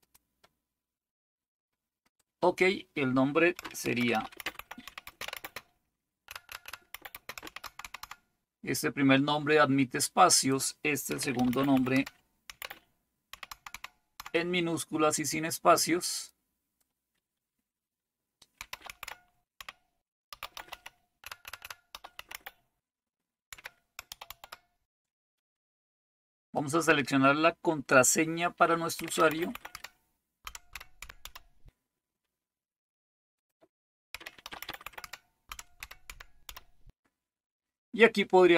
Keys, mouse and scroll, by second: 0.0 click, 2.0 click, 3.6-8.5 typing, 10.0 click, 10.9-14.7 typing, 16.2 click, 18.4-24.8 typing, 26.6 click, 28.7-31.7 typing, 33.4 click, 33.9-37.0 typing.